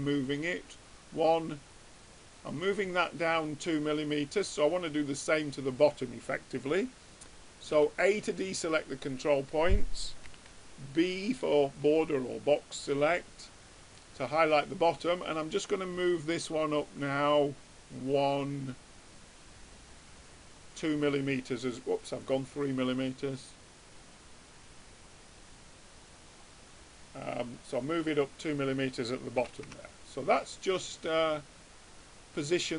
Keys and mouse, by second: 3.6-5.4 middle drag, 8.0 a, 10.4 b, 14.4-18.2 middle drag, 18.2-19.2 drag, 21.5-24.6 middle drag, 24.8-26.8 drag, 27.2-28.9 middle drag, 29.4 a, 30.2 Tab.